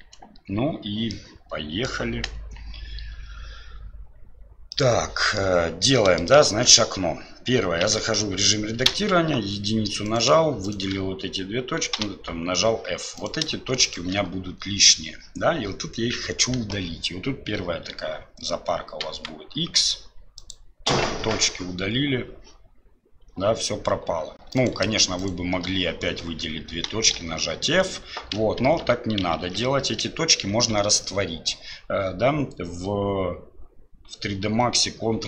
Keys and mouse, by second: 1.1 click, 4.7 click, 6.0 click, 8.9 1, 28.6 ctrl+z, 29.5 ctrl+z.